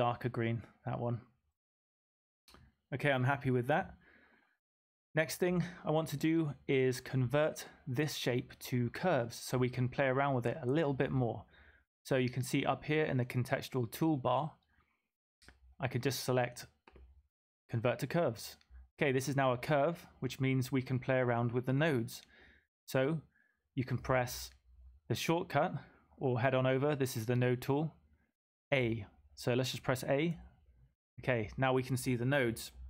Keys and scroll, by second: 30.3 typing.